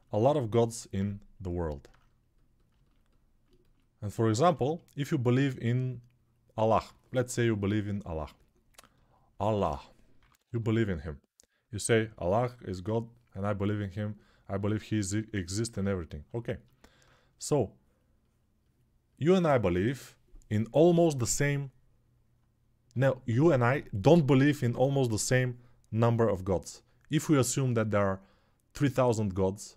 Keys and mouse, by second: 9.3-10.7 typing.